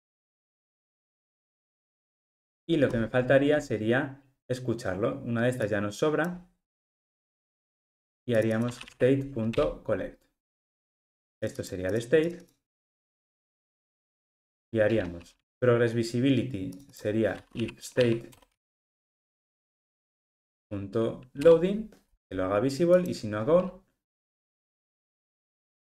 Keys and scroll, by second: 9.6 Return, 21.5 Return.